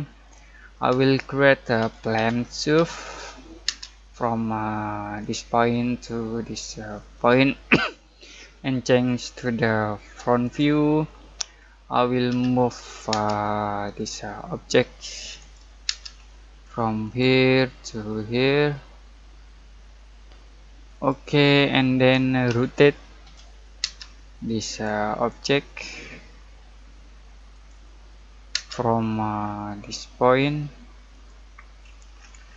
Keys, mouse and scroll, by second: 0.7 middle click, 1.8-3.6 typing, 5.2 click, 11.5-12.2 scroll up 1, 12.2 m, 13.1 space, 13.9 click, 15.8 space, 16.1-17.0 scroll up 1, 17.0 click, 19.9 typing, 20.9 click, 21.5 scroll down 1, 21.5-23.8 typing, 21.8 middle click, 24.2-24.7 scroll up 1, 24.7 click, 28.5 space, 28.9-31.1 scroll up 1, 31.1 click, 31.8-32.1 scroll up 1.